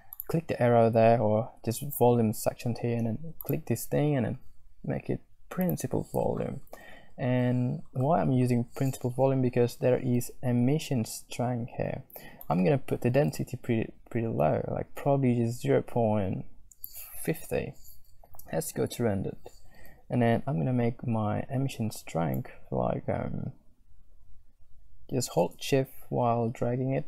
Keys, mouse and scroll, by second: 0.1-6.0 drag, 12.4-12.7 shift+scroll up 1, 12.7-16.9 shift+drag, 16.9-17.2 shift+scroll up 1, 17.9 z, 22.5-27.0 shift+drag.